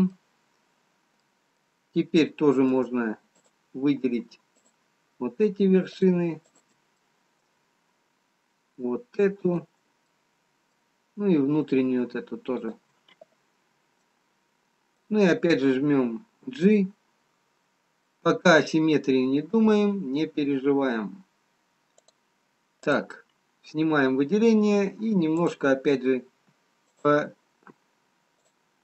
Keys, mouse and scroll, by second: 0.1 middle click, 1.4 middle click, 1.4-2.0 scroll up 1, 2.1-2.6 scroll up 2, 5.6 shift+click, 6.6 shift+click, 7.1 middle click, 8.3-9.1 scroll down 2, 10.2 shift+click, 10.2 middle click, 11.4-13.1 scroll up 2, 13.1 shift+click, 14.0 middle click, 14.0-14.4 scroll down 2, 17.0 g, 23.2 click, 25.4 click, 26.8 g, 27.9 g.